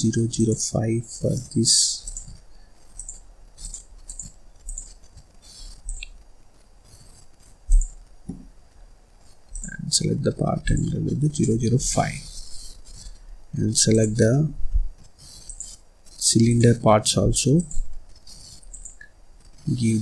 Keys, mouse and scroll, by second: 0.0 click, 1.0-1.3 scroll up 2, 1.3 middle click, 2.0 click, 3.7 click, 4.6 click, 7.8 click, 9.4 click, 11.4 click, 12.3 middle click, 12.8 scroll up 2, 13.0 scroll down 1, 13.2-13.8 scroll up 1, 13.8 click, 15.3 shift+click, 16.3 shift+click, 17.4 click, 18.6 click.